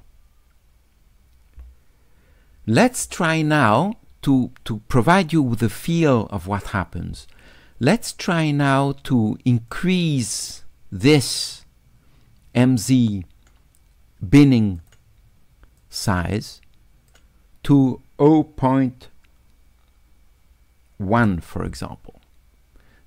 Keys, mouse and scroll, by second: 9.7-11.2 drag, 14.8 click, 15.8-17.1 drag.